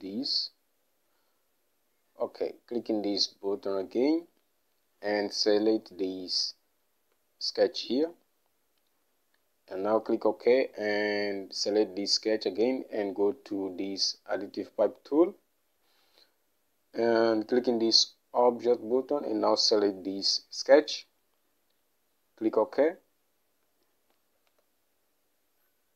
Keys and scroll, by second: 24.6 Home.